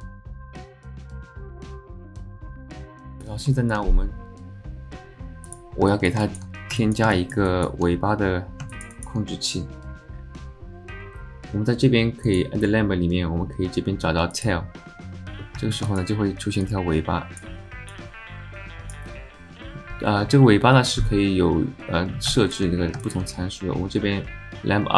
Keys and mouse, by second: 0.0 shift+click, 0.2 shift+click, 0.4 alt+click, 0.6 shift+click, 0.8 alt+click, 0.9 ctrl+z, 0.9 alt+shift+click, 1.2 s, 1.6 alt+click, 1.8 alt+click, 2.0 click, 2.2 click, 2.3 shift+click, 2.5 alt+click, 2.8 shift+z, 2.9 alt+click, 3.4 alt+click, 3.6 shift+click, 5.4 click, 5.9 alt+click, 6.2 shift+drag, 6.8 alt+middle click, 7.1 shift+middle drag, 7.5 alt+middle click, 8.7 alt+shift+middle click, 8.9 alt+middle click, 12.4-14.7 drag, 15.4 alt+middle click, 15.9 alt+shift+middle click, 16.6 click, 17.9-19.0 drag, 22.3 shift+middle click, 23.0 alt+shift+middle click.